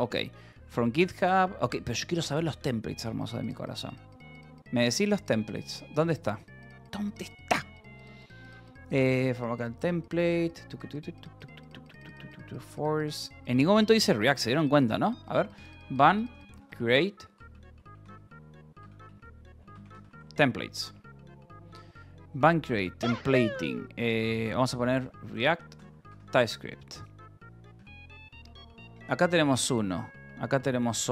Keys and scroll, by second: 15.5-20.2 typing, 24.3-26.3 typing, 27.7 f, 28.2 Escape.